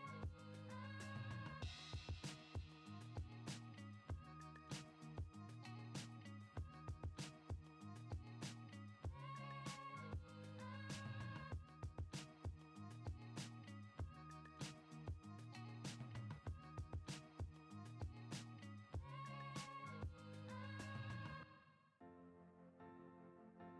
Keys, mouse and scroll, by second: 3.6 click, 4.8 middle click, 4.9 drag, 5.8 shift+a, 11.5 BackSpace, 15.8-16.9 drag, 19.0 middle click, 19.9 middle click, 20.1 click, 21.1-23.7 drag.